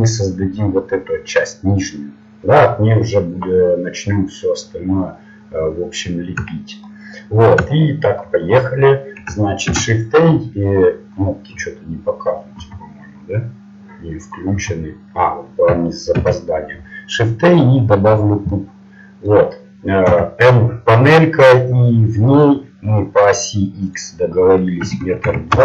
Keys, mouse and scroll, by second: 7.0 middle click, 9.9 middle click, 10.8-12.8 middle drag, 12.8 shift+a, 12.8 n, 14.7 n, 17.6 shift+a, 20.3 n, 25.5-25.6 drag.